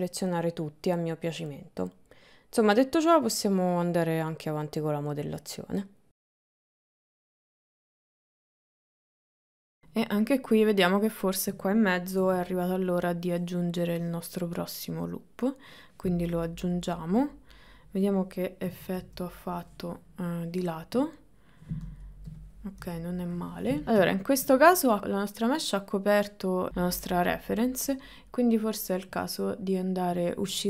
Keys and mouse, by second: 0.4 click, 1.6 g, 3.8 click, 4.4 middle click, 5.6 KP_1, 6.1 ctrl+z, 6.1 shift+middle click, 6.1 f, 6.5 g, 7.3 click, 9.3 shift+middle click, 12.2 ctrl+r, 16.5 click, 16.8-17.9 middle drag, 18.7 KP_1, 19.1 KP_3, 21.1 middle click, 22.1 shift+middle click, 22.8 KP_3, 23.8 ctrl+middle click, 26.7 Tab, 29.2 click.